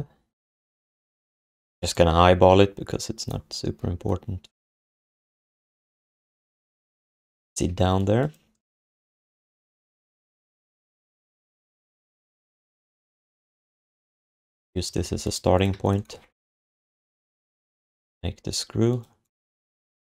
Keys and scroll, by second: 7.7 q, 9.6 q, 10.3 alt+shift+d, 10.8 ctrl+s, 13.9 ctrl+d, 14.9 alt+q, 16.7 ctrl+shift+i, 19.7 w, 20.0 v.